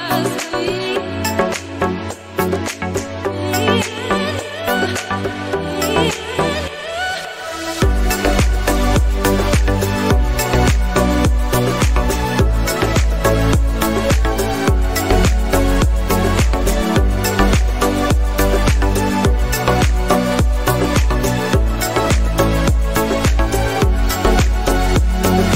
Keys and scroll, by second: 3.8 Right.